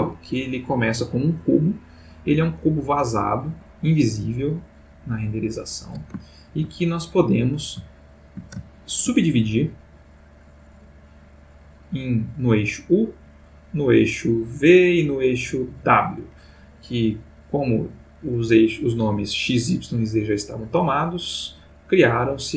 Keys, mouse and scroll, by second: 5.3 click, 6.3 ctrl+middle click, 7.9-8.6 shift+middle drag, 8.7 ctrl+shift+middle click, 10.0 click, 10.9-12.5 drag, 13.3-15.0 drag, 15.3 click, 16.9-18.3 middle drag.